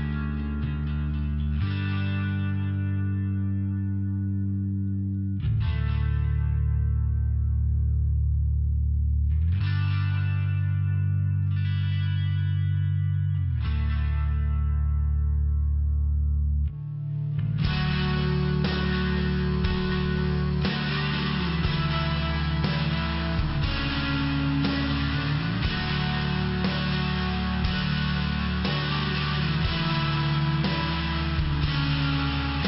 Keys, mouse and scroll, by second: 2.2 click, 2.8 click, 5.8 click, 7.2 click, 7.5 click, 11.6 click, 13.6 click, 16.4 click, 16.7 click, 17.0 click, 17.4 click, 18.6 click, 19.5 click, 21.1 click, 23.9 click, 24.5 click, 27.6 click, 29.9 click, 32.2 click.